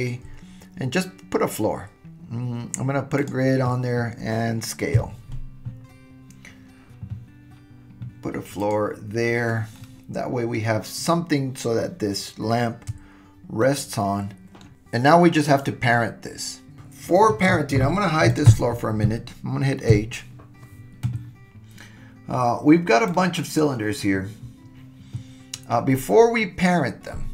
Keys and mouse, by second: 4.9 s, 9.7-10.6 middle drag, 13.7-14.7 shift+middle drag, 18.3 click, 19.9 h, 23.2 click.